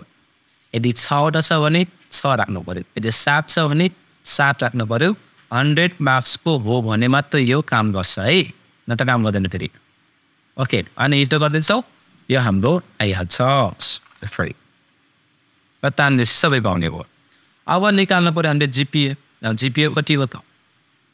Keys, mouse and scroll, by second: 14.1 super+Return, 14.7-18.0 super+drag.